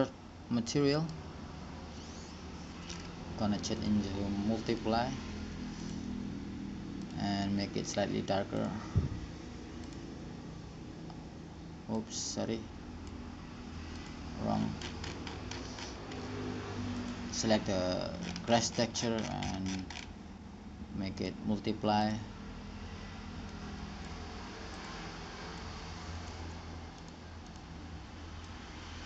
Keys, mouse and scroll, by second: 1.3 right click, 1.8-4.6 drag, 4.6 middle click, 4.7-6.0 drag, 6.2-9.3 drag, 14.3-15.8 drag, 15.8-17.7 middle drag, 17.7-19.1 drag, 19.1-21.4 middle drag, 21.4-23.1 drag, 23.1 middle click, 23.7-29.0 drag.